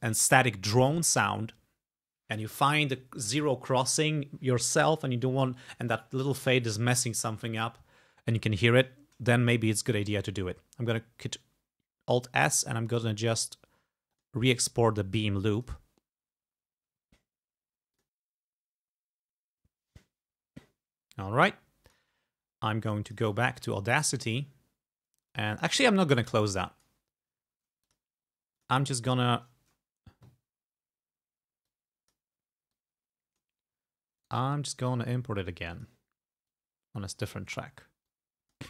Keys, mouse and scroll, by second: 10.0 alt+e, 12.5 click, 13.4 click, 14.2 click, 15.6 click, 18.0 click, 21.9 click, 23.1 click, 24.3 click, 25.3 click, 26.3 click, 27.9 click, 28.6 click, 31.7 click, 32.7 click, 34.2 right click, 35.8 click, 36.5 click, 38.2 click.